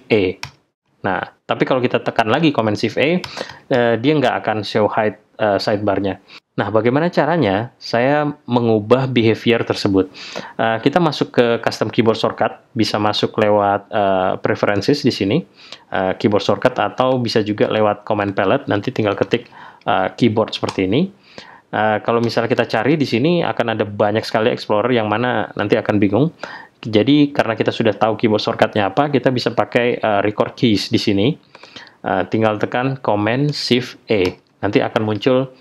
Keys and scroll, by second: 0.4 shift+super+e, 3.2 shift+super+e, 34.2 shift+super+e.